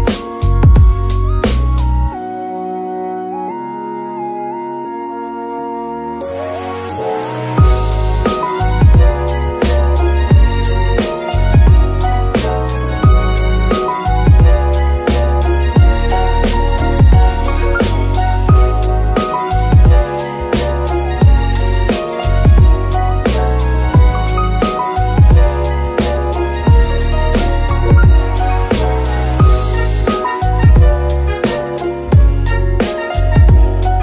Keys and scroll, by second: 0.6 g, 1.6 r, 2.7-5.1 typing, 7.4 KP_7, 9.1 g, 10.4 r, 20.5 g, 21.4 Escape, 29.8 g, 29.9 y.